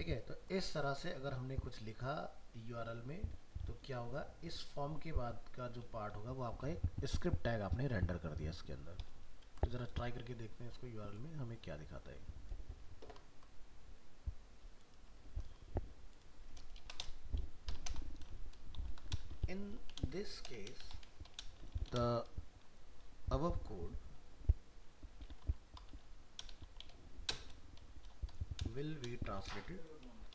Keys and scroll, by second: 15.4 ctrl+s.